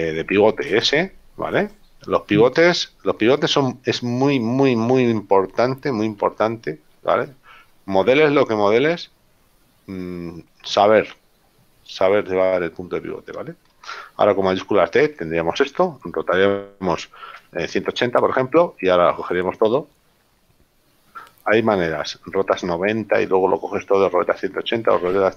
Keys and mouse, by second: 2.2 click, 4.6 click, 6.3 KP_7, 8.2 shift+middle click, 17.3 r, 17.6 KP_8, 17.9 KP_0.